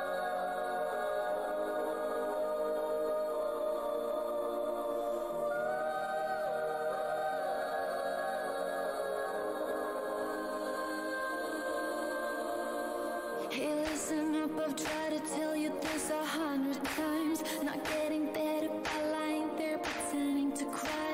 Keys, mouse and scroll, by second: 4.0 alt+click, 4.8-5.1 alt+scroll up 2, 5.0 alt+e, 5.1 w, 6.3 alt+click, 7.4 scroll up 1, 7.4 w, 8.4 click, 10.2 shift+click, 10.7 scroll up 1, 10.7 z, 11.4 scroll down 1, 12.2 click, 13.6 shift+right click, 14.1 alt+click, 14.9 alt+scroll, 14.9 alt+scroll up 1, 18.6 alt+click, 19.3 click, 19.4 w, 19.5 alt+scroll down 1.